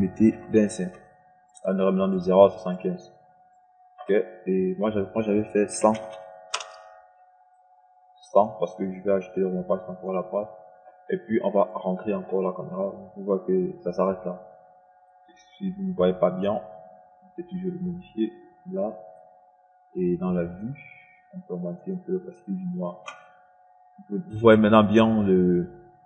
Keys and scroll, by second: 0.9 KP_2, 1.3 KP_5, 6.3 KP_1, 6.6 KP_0, 7.1 Return.